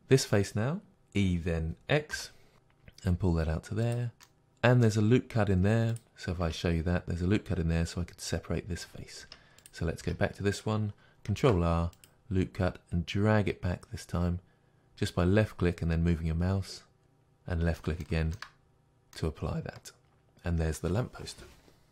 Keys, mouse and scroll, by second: 0.9 e, 4.0 click, 4.3 Tab, 4.3-6.0 middle drag, 6.0 click, 6.5 Tab, 9.6 click, 10.0 Tab, 11.4 ctrl+r, 17.0-21.9 middle drag, 18.7-19.2 scroll down 2.